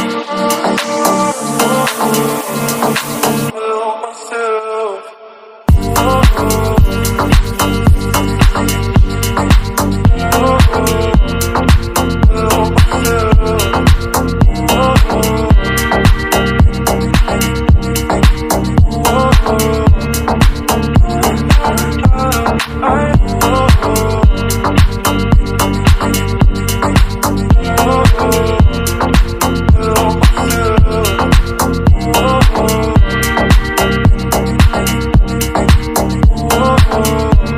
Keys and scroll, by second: 10.2 ctrl+j, 31.0 Down, 31.8 shift+Down, 32.3 Down, 32.5 Down, 33.4 ctrl+t, 34.5 Down, 35.6 Down.